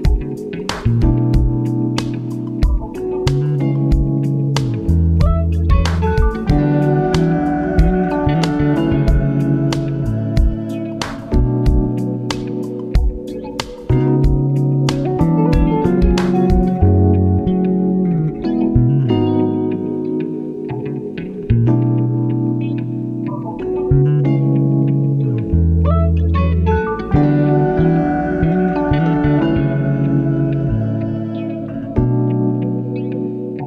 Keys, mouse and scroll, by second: 2.8 a, 4.4 s, 8.1-9.2 scroll down 5, 9.2-10.6 scroll down 1, 11.9 ctrl+r, 17.2-17.8 scroll up 1, 17.8 scroll down 1, 18.2-19.8 middle drag, 19.8-21.5 scroll down 2, 22.1-24.0 drag, 25.8 click, 26.6-27.3 middle drag, 27.3-27.9 scroll up 3, 27.9-28.4 scroll down 2, 28.4-30.7 middle drag, 32.3-33.6 drag.